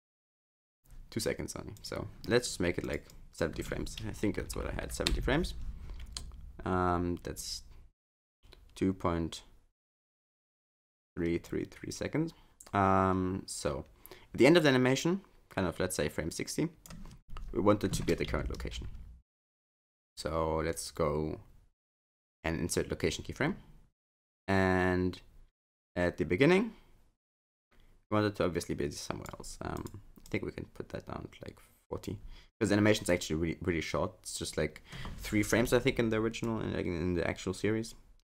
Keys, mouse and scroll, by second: 7.4 click, 11.5 click, 24.4 click, 29.8 click, 30.3 click, 33.1 click, 36.5 click.